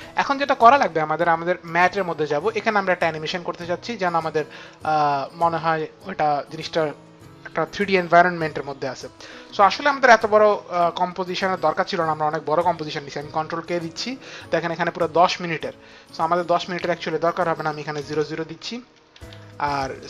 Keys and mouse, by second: 1.5 click, 5.1 click, 13.7 ctrl+k, 16.0 click, 18.9 Right, 18.9 KP_0, 19.1 Right, 19.8 BackSpace.